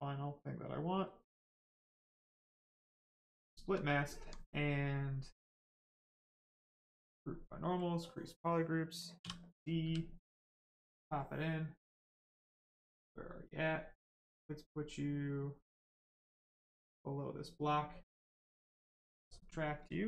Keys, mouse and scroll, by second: 1.2 right click, 2.3 click, 3.0 right click, 4.0 alt+right click, 5.8 click, 9.2 d, 9.8 w, 10.7 click, 16.5 click, 19.1 right click.